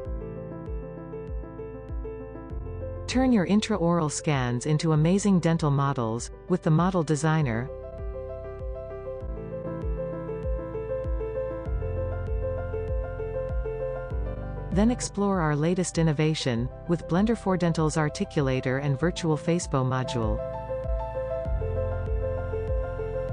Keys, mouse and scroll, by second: 1.0-1.6 scroll down 4, 2.1 r, 3.1 click, 4.6 r, 6.1 click, 6.4 middle click, 9.2 r, 13.9 middle click, 14.8 middle click, 15.0 middle click, 15.1 middle click, 15.3 middle click, 15.7-16.7 drag, 18.4 click.